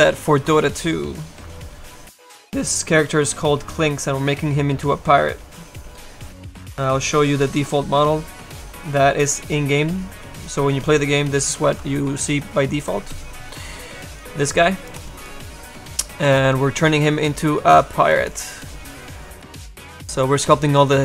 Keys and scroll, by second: 13.7 space.